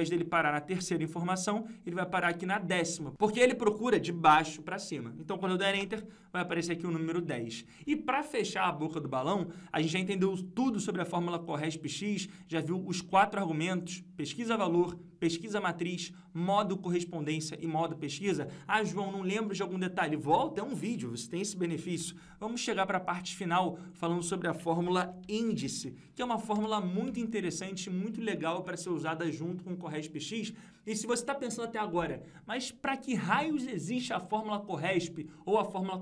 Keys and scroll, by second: 10.6 F2.